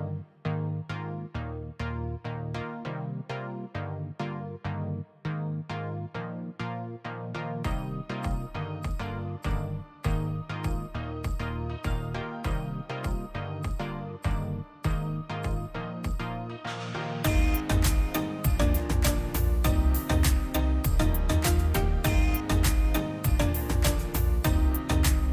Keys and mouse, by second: 1.3-2.1 drag, 2.3 click, 3.3 click, 4.0 middle click, 4.5 middle click, 5.0-7.0 drag, 7.7 m, 8.0 m, 8.5 middle click, 9.1-10.4 middle drag, 10.5 middle click, 10.7-12.3 middle drag, 12.5 click, 12.8 middle click, 13.3 shift+d, 13.9 click, 14.0 middle click, 14.3 click, 15.1 click, 15.2 n, 15.6-16.0 drag, 16.0 BackSpace, 16.4 BackSpace, 16.6 l, 17.2 click, 19.8-20.8 drag, 21.0-21.4 drag, 24.7 middle click.